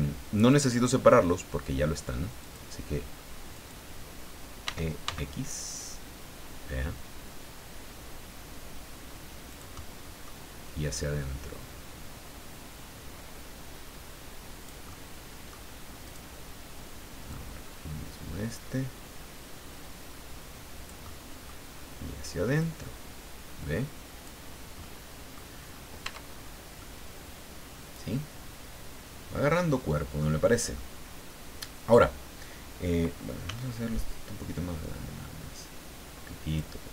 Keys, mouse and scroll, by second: 0.5 click, 2.4 click, 3.5 right click, 4.6 e, 5.0 x, 9.5 click, 9.8 middle click, 10.9-14.8 drag, 14.9 middle click, 16.0 right click, 17.3-21.6 drag, 22.6-24.4 drag, 24.5 scroll down 1, 24.8 middle click, 25.7 scroll up 1, 26.0 Tab, 26.5 scroll down 1, 26.8-30.4 middle drag, 30.7-32.1 middle drag, 33.4 s, 36.5 click.